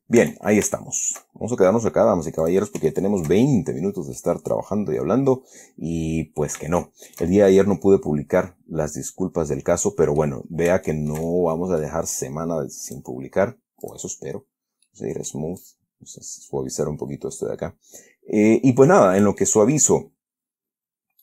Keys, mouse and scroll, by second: 0.0 shift+scroll up 2, 0.5 Tab, 1.1 shift+middle click, 2.7 click, 3.2 shift+click, 4.5-7.1 drag, 7.1 shift+click, 7.7-8.1 shift+scroll down 3, 8.1-10.7 middle drag, 11.2-12.3 shift+middle drag, 13.2 click, 14.2 click, 15.2 middle click, 15.9-20.3 drag.